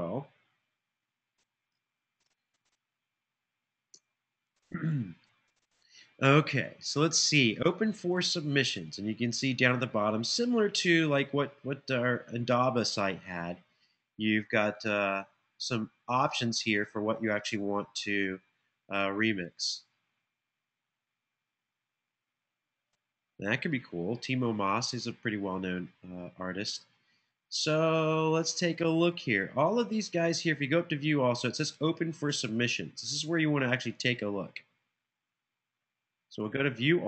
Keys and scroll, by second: 1.6 space, 2.2 super+v, 3.7 Return.